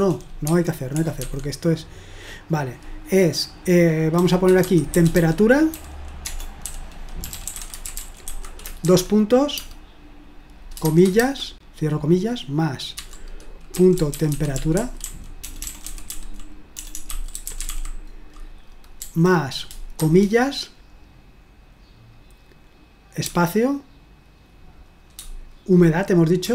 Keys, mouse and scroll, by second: 0.0-1.2 typing, 4.4-9.7 typing, 10.9-11.2 typing, 13.5-19.0 typing, 20.0 typing, 23.3 space, 26.2-26.5 typing.